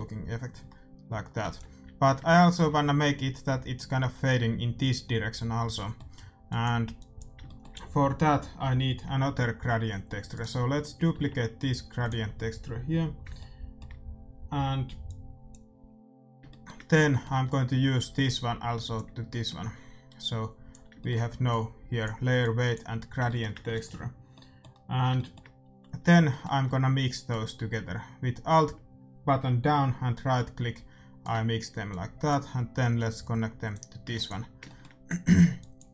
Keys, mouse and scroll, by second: 1.4 ctrl+s, 1.4 middle click, 5.7-9.2 middle drag, 6.4-8.8 drag, 10.3-12.1 right drag, 11.1 shift+d, 12.3-14.3 middle drag, 16.4-18.9 shift+super+middle drag, 17.9-19.8 drag, 19.2 middle click, 19.8 middle click, 20.1-24.9 drag, 23.7 ctrl+s, 23.8-25.8 middle drag, 26.2-28.2 middle drag, 27.2-29.2 right drag, 31.8-34.9 drag, 34.1 ctrl+s, 34.6-35.9 middle drag, 35.5-35.9 drag.